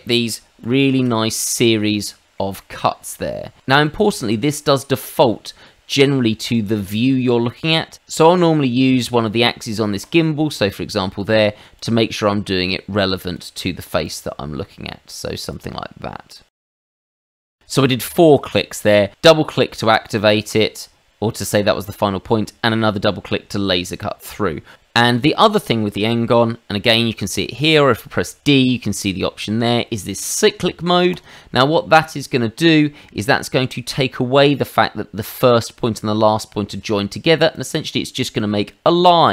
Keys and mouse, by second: 0.6 ctrl+z, 1.2 middle click, 2.0 shift+middle click, 2.6 middle click, 3.1 click, 3.8 middle click, 6.7 middle click, 7.9 middle click, 10.0 click, 11.7 click, 14.0 click, 15.5 click, 16.3 click, 16.9 click, 17.1 click, 17.1 click, 17.5 middle click, 27.7 d, 31.1 click, 32.5 click, 37.5 click.